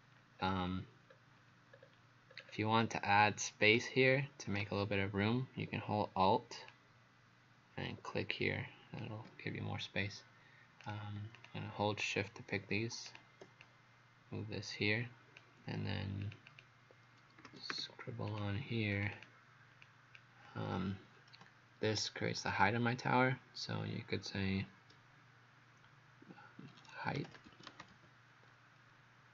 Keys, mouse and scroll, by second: 0.4-0.8 scroll down 1, 1.1-1.7 scroll up 1, 1.7 scroll down 2, 2.3-3.2 scroll up 2, 3.2 click, 11.4 shift+click, 13.1 click, 13.6 click, 16.3 click, 16.5 click, 17.2-18.2 typing, 18.3 click, 18.9 click, 19.9 click, 27.0-28.4 typing.